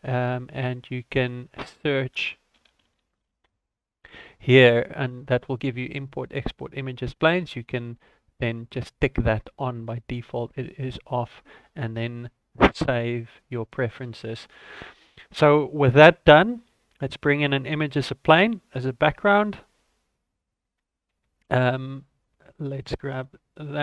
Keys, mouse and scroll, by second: 16.9 shift+a.